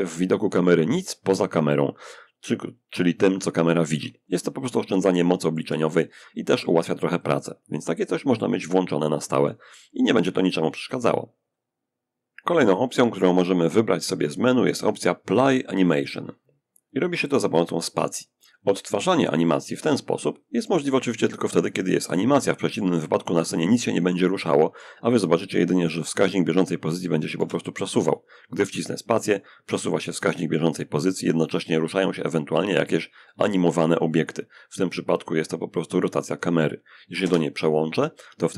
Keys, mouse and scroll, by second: 3.6 middle click, 4.3-5.3 shift+drag, 11.4 n, 19.7-24.5 drag, 26.6 space, 36.4 0.